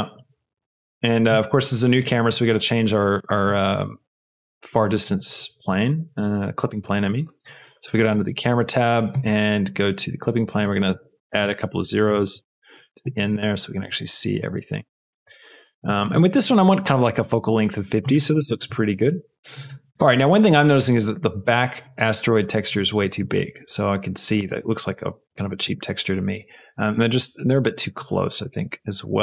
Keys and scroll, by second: 11.8 KP_0, 12.3 Return.